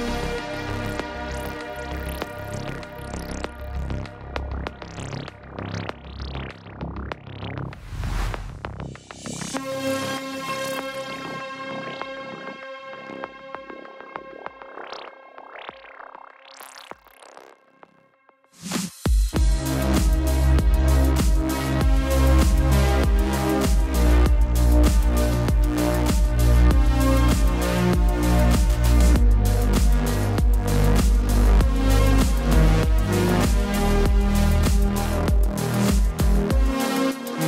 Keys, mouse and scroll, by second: 2.3 BackSpace, 2.5 click, 3.8 click, 15.3 typing, 28.4 x, 30.1 x, 31.0 click, 31.9 ctrl+t, 32.9 click, 33.3 click, 35.9 Return, 37.1 right click.